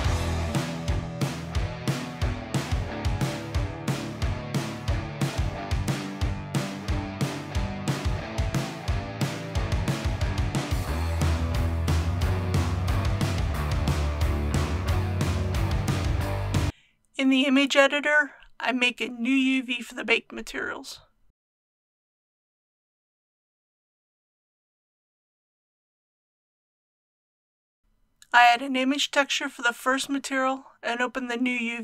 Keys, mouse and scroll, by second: 0.0 middle click, 0.0 alt+shift+click, 0.2 scroll up 1, 0.3 middle click, 0.5 middle click, 0.7 scroll down 1, 0.9 alt+shift+click, 1.4 alt+shift+click, 1.4 ctrl+z, 1.6 shift+middle click, 1.7 alt+shift+click, 1.9 shift+middle click, 2.4 alt+shift+click, 2.7 ctrl+z, 3.1 middle click, 3.2 alt+shift+click, 3.5 shift+click, 4.0 shift+c, 4.0 shift+click, 4.2 middle click, 4.3 shift+click, 4.7 click, 4.9 Return, 5.0 ctrl+v, 5.1 click, 6.0 alt+shift+click, 6.2 shift+middle click, 6.3 alt+shift+click, 6.3 middle click, 6.5 alt+shift+click, 7.1 middle click, 7.3 click, 7.4 ctrl+c, 7.5 click, 7.7 Return, 7.7 click, 8.0 click, 8.3 scroll up 1, 8.5 click, 8.7 Return, 8.8 ctrl+v, 9.4 scroll up 1, 9.5 alt+shift+click, 9.7 middle click, 9.8 alt+shift+click, 9.9 middle click, 10.0 alt+shift+click, 10.1 ctrl+z, 10.6 click, 10.7-11.1 scroll down 2, 10.9 KP_1, 11.1 click, 11.3 Return, 11.6 click, 11.9 shift+middle click, 12.0 click, 12.2 middle click, 12.5-12.8 scroll down 2, 12.6 middle click, 13.1 click, 13.2 ctrl+c, 13.3 click, 13.5 Return, 13.6 ctrl+v, 13.7 scroll down 1, 16.2 click, 22.3 d.